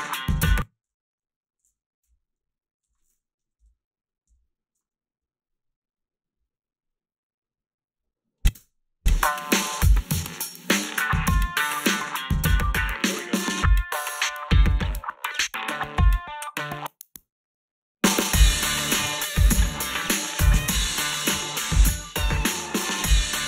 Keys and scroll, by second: 0.3 space, 0.9 ', 4.2 \, 8.6 space, 18.6 h.